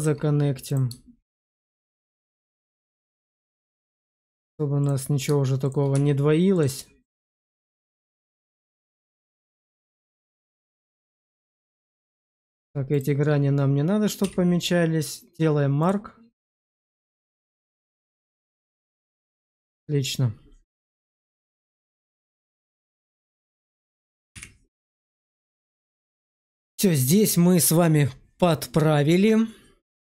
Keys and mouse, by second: 0.6 click, 1.4 shift+click, 1.7 1, 2.2 shift+middle click, 2.7 middle click, 3.5 click, 4.7 click, 5.9 1, 8.1 click, 8.8 shift+click, 9.1 1, 9.7 click, 10.4 shift+click, 10.8 1, 11.3 Tab, 11.7 click, 12.0 shift+middle click, 12.9 shift+click, 14.1 q, 16.6 middle click, 16.8 Tab, 17.5-19.0 middle drag, 20.9 middle click, 22.2 shift+middle click, 22.5-23.6 middle drag, 24.3 /, 25.5 middle click, 26.1 shift+middle click, 27.0 middle click.